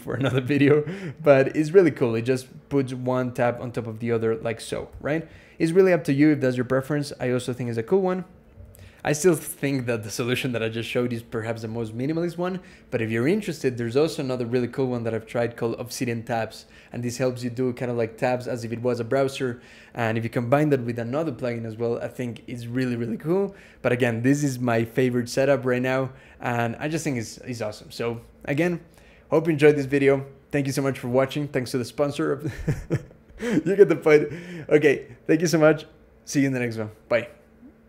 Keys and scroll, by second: 4.9 super+0.